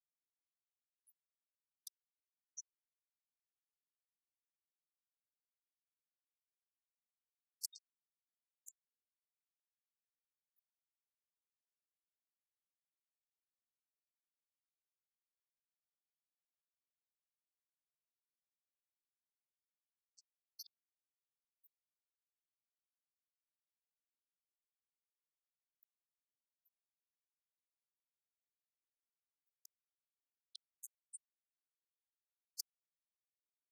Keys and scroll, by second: 2.6 shift+Up, 3.0 shift+Down, 12.2 shift+Left, 23.3 shift+Right, 31.3 ctrl+c.